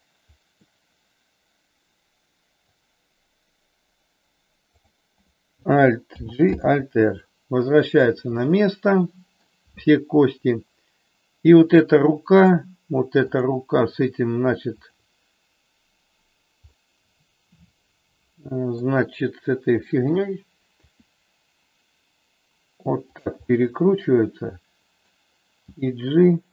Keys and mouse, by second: 0.5-2.6 middle drag, 6.1 alt+g, 6.5 alt+r, 8.3-9.5 middle drag, 13.2 click, 14.8 shift+click, 16.7-18.8 middle drag, 20.7 r, 23.5-25.1 middle drag, 25.6 g.